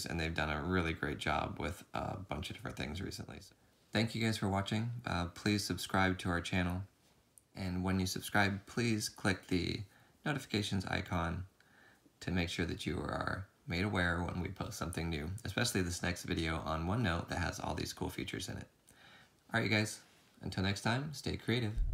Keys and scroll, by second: 0.0 ctrl+z, 0.5 ctrl+z, 1.2 ctrl+z, 1.7 ctrl+z, 3.1 ctrl+z, 5.8 ctrl+v, 6.1 ctrl+v, 6.7 ctrl+v, 9.6 v, 10.8 ctrl+v, 11.5 ctrl+v.